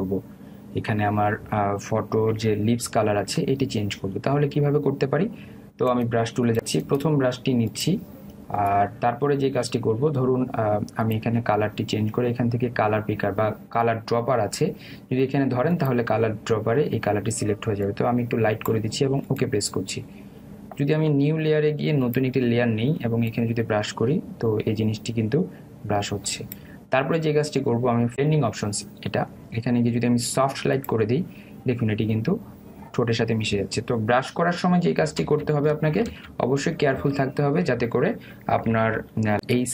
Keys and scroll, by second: 36.2 ctrl+alt+z.